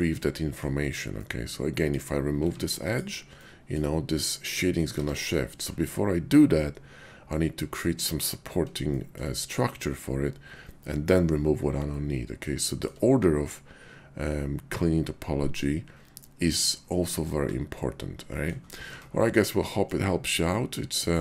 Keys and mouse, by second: 0.1 middle click, 1.2 middle click, 2.3 x, 3.3 middle click, 4.9 ctrl+z, 8.9 shift+click, 11.9 middle click, 12.7 shift+click, 18.3 middle click, 18.9 Tab, 19.7 middle click, 20.3 /, 20.4 /, 20.8 /.